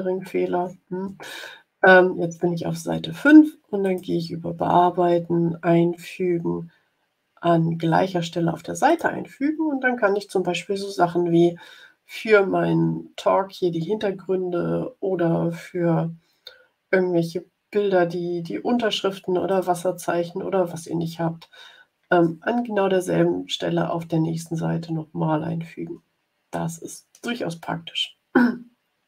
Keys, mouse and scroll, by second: 3.8 click, 8.8 click, 11.8 scroll up 2, 15.3-15.6 scroll down 2, 19.4 click, 24.4-24.8 ctrl+scroll down 2, 25.4 ctrl+scroll down 2, 26.4 click, 27.8-28.4 ctrl+scroll up 4, 28.8 ctrl+scroll up 2.